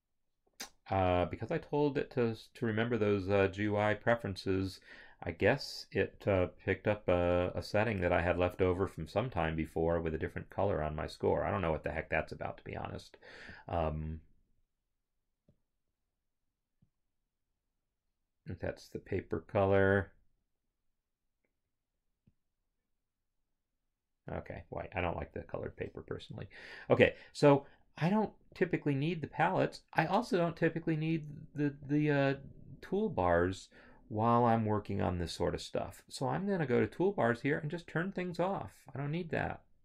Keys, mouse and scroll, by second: 1.6 scroll, 6.2 click, 11.1 click, 13.5 click, 17.1 click, 20.0 click, 22.3 click, 25.1 Home, 28.5 click, 31.9 click, 38.3 click.